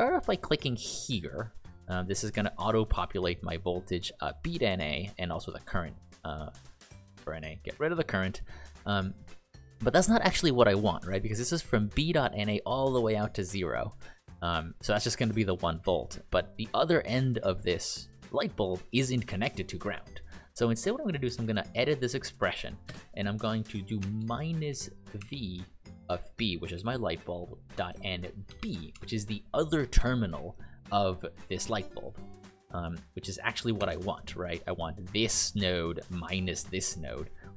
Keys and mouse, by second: 1.2 click, 24.7-29.9 typing.